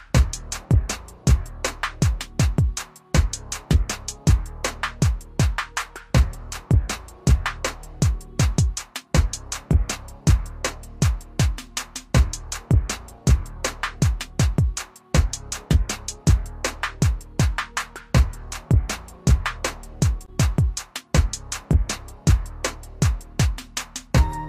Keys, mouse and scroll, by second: 0.0 click, 0.1 typing, 6.7 click, 6.7 typing, 11.2 click, 11.2 typing, 14.9-15.7 typing, 15.7 click, 18.3 typing, 19.6 click, 19.6 typing.